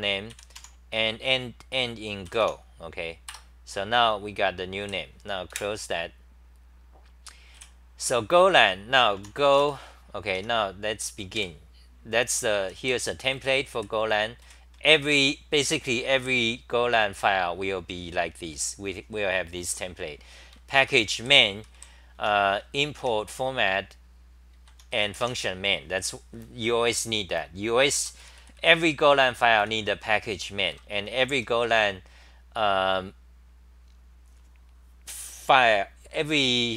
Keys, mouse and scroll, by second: 0.3 ., 0.5 u, 3.4 Return, 4.8 w, 5.5 super+w, 7.5 w, 9.1 u, 10.4 Home, 11.3 super+=, 12.6 d, 14.4 g, 14.7-15.1 6, 20.8 ctrl+g, 21.0-25.7 typing, 27.9 ctrl+g, 28.2 d, 29.6 2, 30.7 ctrl+g, 30.7-32.1 typing.